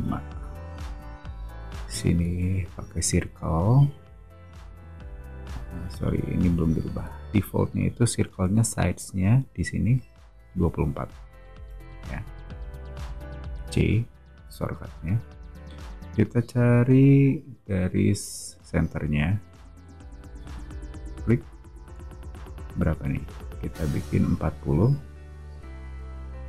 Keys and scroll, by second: 0.2 5, 0.3 Return, 0.8 space, 2.1 c, 7.0 2, 7.4 4, 11.5 Return, 24.7-26.3 typing.